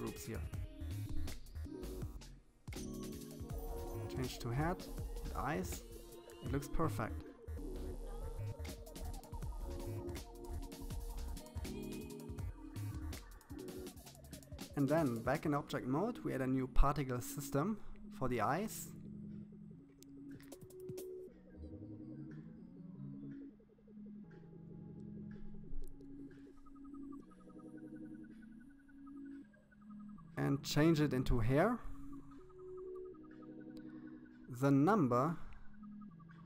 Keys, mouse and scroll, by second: 1.7 click, 3.8 click, 6.0-7.1 middle drag, 7.1-7.9 scroll down 1, 7.9-9.4 drag, 13.5 click, 15.8-17.6 drag, 19.3 click, 22.2 click, 24.0 click, 27.8 BackSpace, 28.0 BackSpace, 31.4 click, 33.9-35.4 drag.